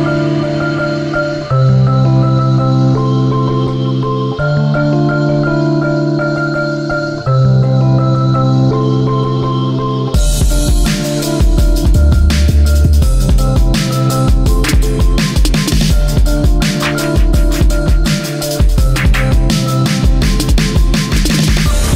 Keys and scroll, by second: 4.3 ctrl+z, 8.9 ctrl+z, 12.1 ctrl+z, 16.1 Delete, 20.8 ctrl+z.